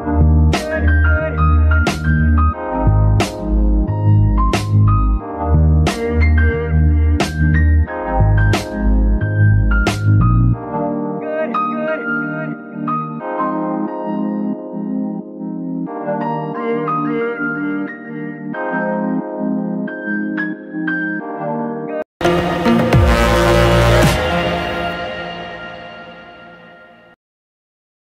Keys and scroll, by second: 4.2 Escape, 9.2 Escape, 9.7 g, 9.8 r, 13.3 Escape, 14.3 r, 15.2 Escape, 16.0 r, 16.7 Escape, 18.8 g, 18.9 y, 21.6 Escape.